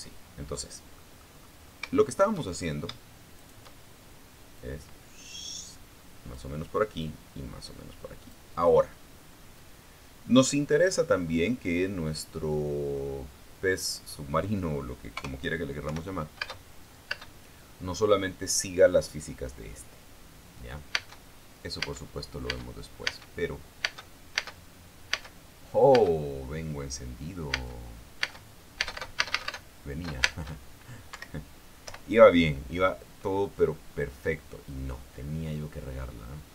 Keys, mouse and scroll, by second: 0.4 Escape, 1.6 middle click, 2.1-3.1 scroll down 3, 3.2-3.5 shift+scroll up 2, 4.0 shift+right click, 5.2-7.2 drag, 7.7-9.2 drag, 10.2-11.3 drag, 13.6-14.6 drag, 15.8 KP_0, 16.5 p, 17.1 space, 18.0 space, 21.7 space, 22.5 space, 24.3 space, 25.6 space, 25.9 space, 27.2 space, 28.4 space, 31.6 space, 31.9 Escape, 32.6 p.